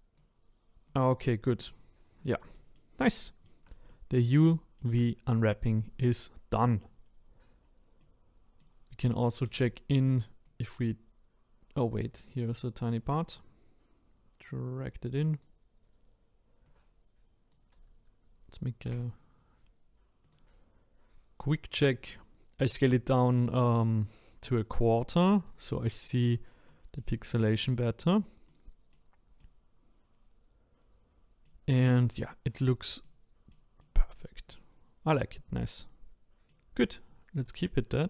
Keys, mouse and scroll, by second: 0.9 click, 1.6-5.8 middle drag, 5.8 click, 6.5 middle click, 7.0-7.5 scroll up 2, 7.6-8.0 scroll down 2, 8.0-9.4 middle drag, 9.4 a, 11.9 click, 12.6 click, 17.5 click, 18.8 s, 25.4 click, 25.8-38.0 middle drag.